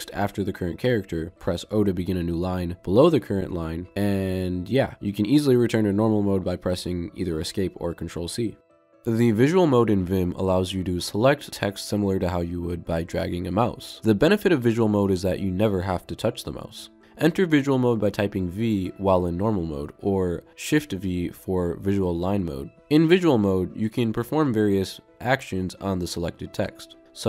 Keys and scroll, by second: 2.2 0, 19.5 v, 21.6 shift+v.